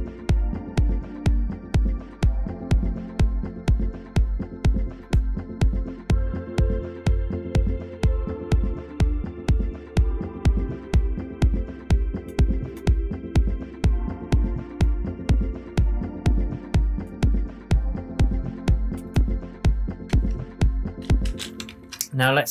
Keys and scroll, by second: 21.2 space, 21.6 super+s.